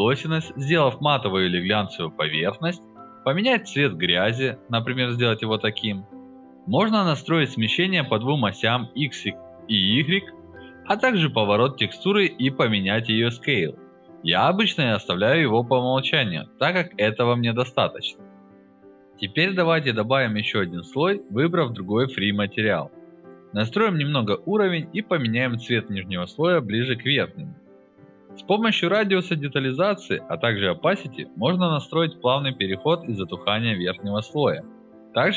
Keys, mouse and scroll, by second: 0.7-3.0 drag, 3.2 alt+click, 3.4 alt+right click, 4.1 click, 4.6-6.8 drag, 7.2 click, 7.4 alt+click, 8.3 alt+middle click, 8.5 alt+click, 9.1-9.8 drag, 10.2 click, 10.8-12.0 drag, 12.3 alt+click, 13.5 alt+click, 20.0 click, 20.4 alt+right drag, 20.6 alt+drag, 20.7 alt+right drag, 20.7 alt+drag, 20.9 alt+right drag, 21.0 alt+click, 21.1 alt+right click, 21.2 alt+click, 21.3 alt+right drag, 21.7-23.9 drag, 24.1 alt+click, 24.6 click, 25.0 click, 25.3-27.1 drag, 27.3 click, 27.4 alt+click, 27.6 alt+right click, 27.8 alt+click, 27.9 alt+right click, 28.0 alt+right click, 28.1 alt+click, 28.4 click, 28.9 alt+click, 29.0 alt+right click, 29.4-31.3 drag, 31.5-32.5 drag, 32.8-34.7 drag, 35.1-35.3 drag.